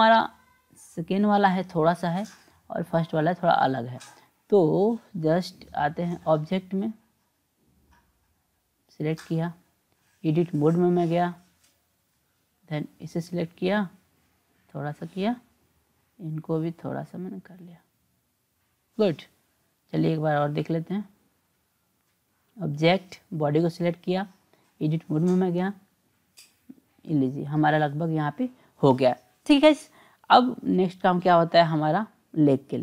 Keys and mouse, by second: 5.1-6.3 drag, 7.6 click, 9.2-11.8 drag, 13.0 click, 14.1-15.3 drag, 16.4 click, 17.5-18.8 drag, 20.8 click, 21.9 click, 23.4 drag, 24.5-25.8 drag, 32.5-32.8 drag.